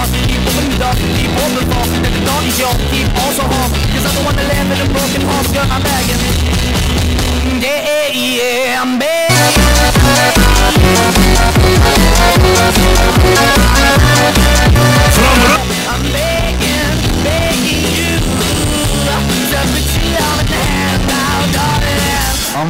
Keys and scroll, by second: 15.9 Page_Down.